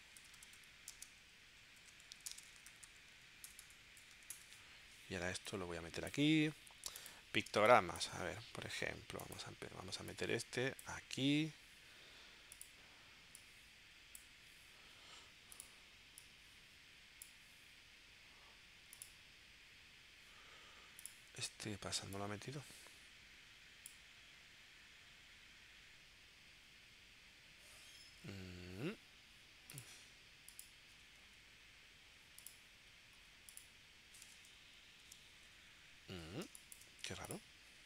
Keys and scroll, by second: 0.0-4.0 typing, 4.3 Return, 7.6 space, 34.5 super+y, 35.0 super+y, 36.5 space.